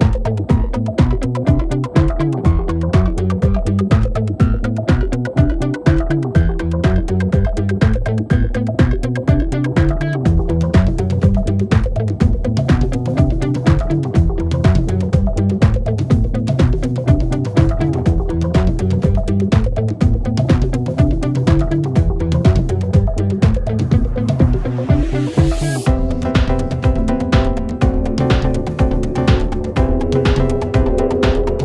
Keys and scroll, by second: 0.9 4, 1.4 ctrl+z, 3.0 ctrl+z, 15.7 2, 18.5 ctrl+d, 18.6 Escape, 20.0 4, 23.1 3, 26.9 shift+i, 31.5 ].